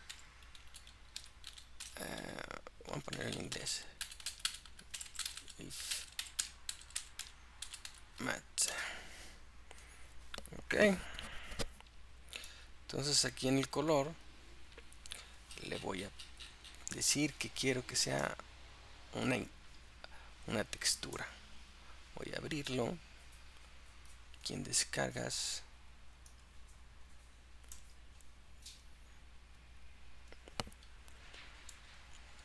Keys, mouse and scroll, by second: 5.1 BackSpace, 12.5-13.8 drag, 14.3-18.7 drag, 21.2-24.3 drag.